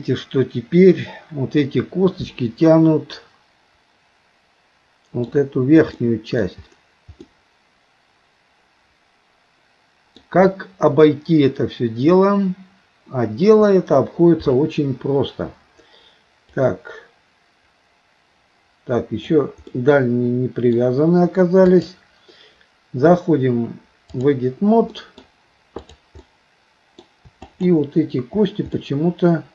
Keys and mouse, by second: 6.0 middle click, 7.3-10.2 middle drag, 16.6-19.4 drag, 19.7-20.7 middle drag, 21.9-25.0 drag, 25.0 middle click, 25.9 click, 26.3 middle click, 27.5 shift+click, 28.7 middle click.